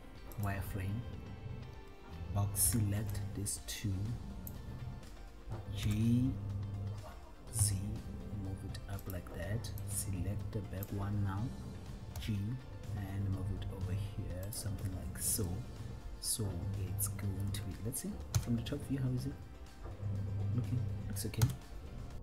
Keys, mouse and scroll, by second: 2.8 b, 6.0 g, 7.9 z, 9.4 click, 9.9-11.1 drag, 12.4 g, 14.8 click, 15.7-18.0 middle drag, 18.7 KP_7, 21.6 KP_1.